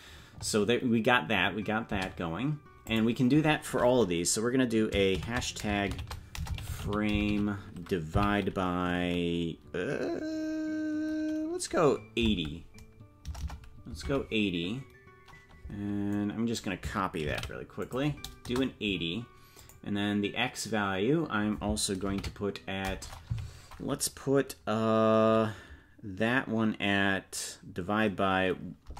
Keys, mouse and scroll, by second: 2.8-28.9 drag.